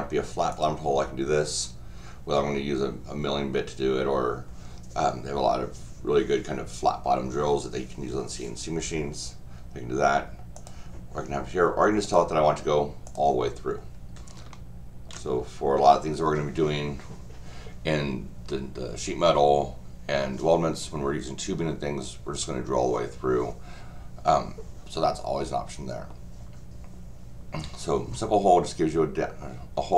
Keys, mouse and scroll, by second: 0.5 click, 10.5 click, 12.0 click, 13.0 click, 14.5 shift+middle click, 15.5-20.9 scroll up 2.